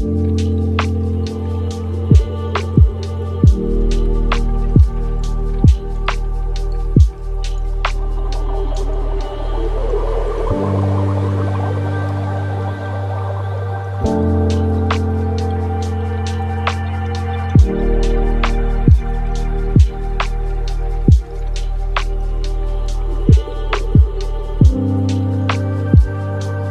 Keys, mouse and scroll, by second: 5.6-6.3 drag, 6.3-7.5 middle drag, 7.5-10.6 shift+drag, 15.0-17.4 drag, 17.4-18.5 middle drag, 18.5-18.9 scroll down 2, 19.0-23.5 middle drag, 23.5-26.5 shift+drag.